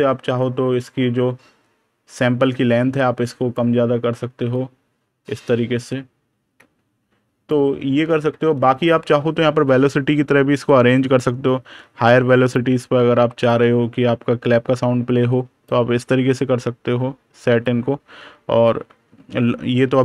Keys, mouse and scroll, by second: 4.4 click, 8.4 super+KP_Subtract, 11.3 click, 17.5 click.